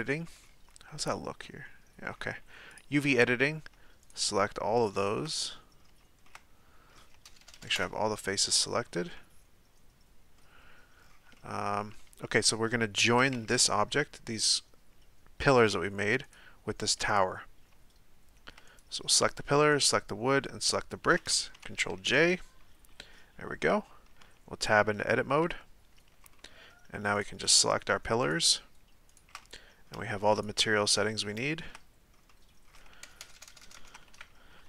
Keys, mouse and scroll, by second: 0.4-2.7 middle drag, 2.7-4.0 drag, 4.0 shift+right click, 4.8 shift+right click, 5.2-7.2 middle drag, 7.2 ctrl+KP_Add, 7.4 ctrl+KP_Add, 8.5-13.3 middle drag, 13.3 Tab, 16.3 right click, 17.1 right click, 18.7 right click, 19.7 shift+right click, 20.5 shift+right click, 21.9 ctrl+j, 25.5 Tab, 26.3-27.1 middle drag, 27.1 right click, 28.2 shift+right click, 29.1 shift+right click, 29.4 middle click, 30.3 shift+right click, 30.9-33.2 shift+middle drag, 33.2-33.7 ctrl+KP_Add, 34.1 KP_1.